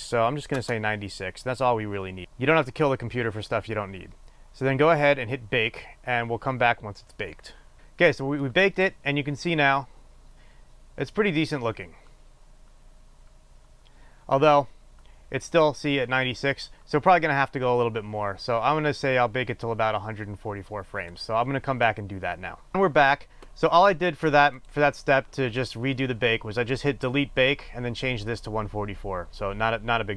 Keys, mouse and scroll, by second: 7.8-30.1 drag.